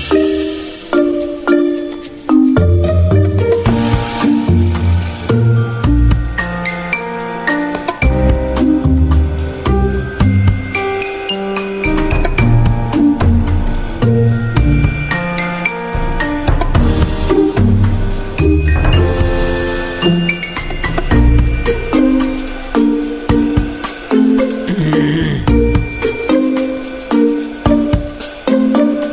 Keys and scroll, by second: 9.0 g, 27.2 z.